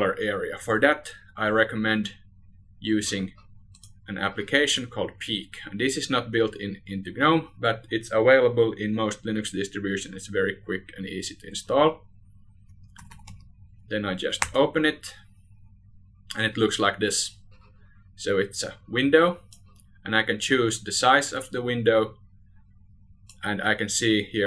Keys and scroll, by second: 0.4 ctrl+alt+shift+r.